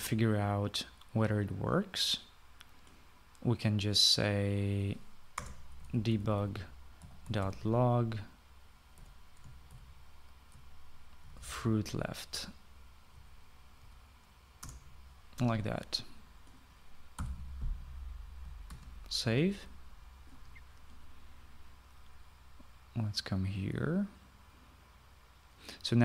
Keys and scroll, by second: 0.3 ctrl+s, 6.3 Return, 6.5-8.8 typing, 9.9-10.6 typing, 11.9-13.0 typing, 14.1 Left, 14.7 Down, 15.5 Return, 18.1 ;, 19.6 ctrl+s.